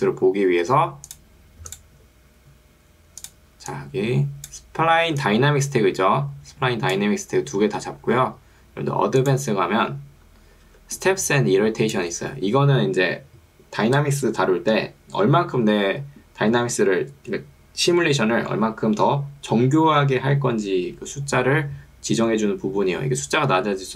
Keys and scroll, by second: 5.1 ctrl+2, 8.1 Escape, 10.7 ctrl+2, 12.3 Escape.